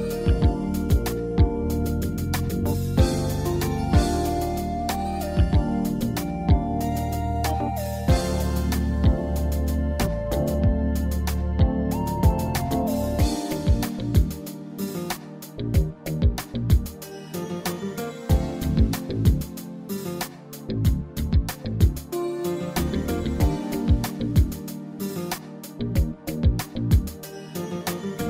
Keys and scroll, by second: 1.9 ctrl+r, 11.0 alt+z.